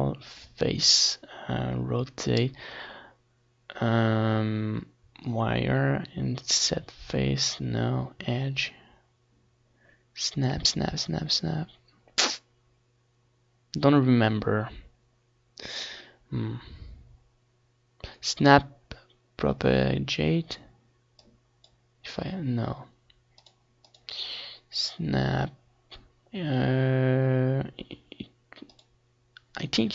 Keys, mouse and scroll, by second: 22.5 click, 28.6-29.7 drag.